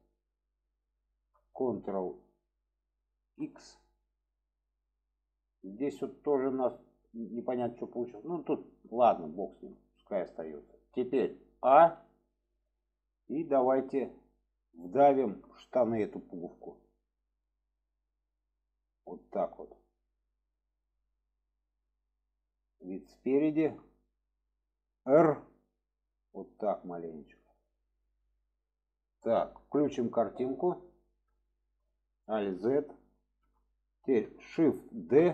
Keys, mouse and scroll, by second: 0.8 alt+shift+click, 3.4 ctrl+x, 3.9-5.9 middle drag, 7.5-8.0 middle drag, 8.8-10.1 middle drag, 12.9-13.9 middle drag, 15.1 shift+middle click, 16.4-20.0 drag, 20.3-21.4 middle drag, 21.8-23.0 middle drag, 23.4 shift+middle drag, 28.5-29.5 middle drag, 30.9 click, 31.4 shift+middle drag, 32.4 alt+z, 33.2 shift+middle drag, 34.9 shift+d.